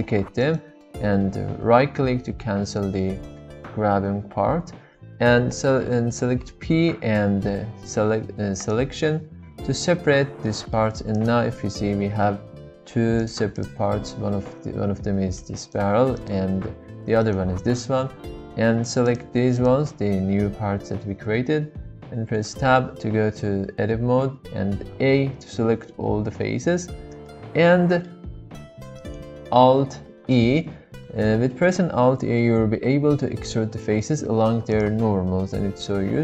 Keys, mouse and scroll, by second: 6.4 p, 10.1 Tab, 10.4-10.9 middle drag, 11.1 click, 12.7 g, 13.8 g, 16.6 g, 19.0 click, 19.5 click, 22.3 Tab, 24.8 a, 27.2 middle click, 30.0 alt+e.